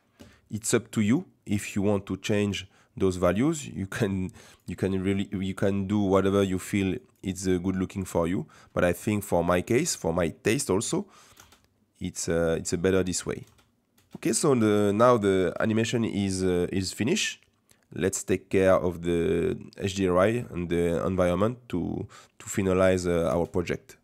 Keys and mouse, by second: 1.0-4.5 drag, 7.0-8.2 drag, 9.2-11.3 drag, 11.9 space, 12.4 click, 13.5 space, 13.7 click, 14.0 space, 15.4 space, 17.0-18.6 drag, 19.1-23.2 drag, 23.3 space.